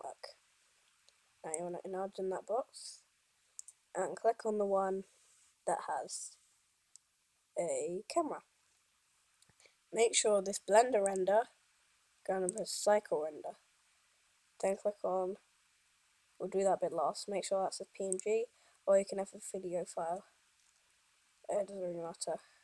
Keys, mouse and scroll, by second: 1.8 click, 8.7 scroll down 2, 11.2 click, 13.6 scroll down 1, 18.2 click, 20.8 scroll down 1.